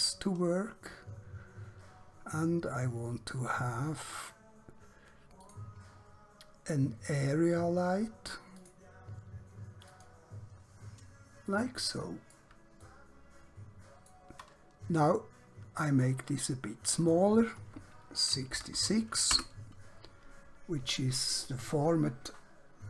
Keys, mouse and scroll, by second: 5.4 click, 8.6 click, 11.4 middle click, 12.8 shift+middle click, 15.8 click, 18.4 6, 18.6 6, 19.4 Return.